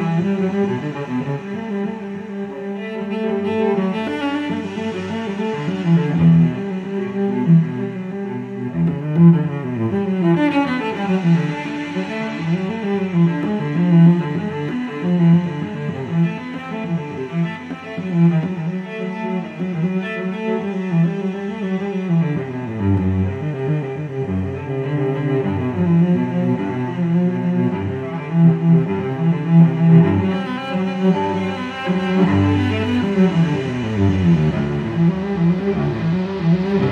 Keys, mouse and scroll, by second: 0.5 click, 0.9 click, 2.4 click, 3.7 right click, 5.4 click, 6.7 click, 8.3 click, 9.3 click, 9.7 click, 10.7-11.1 scroll down 2, 11.3-11.6 scroll up 2, 12.5 click, 12.9 click, 15.0 click, 16.6 ctrl+click, 18.1 ctrl+click, 20.2 click, 25.0 click, 26.6 click, 29.6 click, 30.4 click, 31.9 click, 32.8 click, 34.5 click, 35.5 click.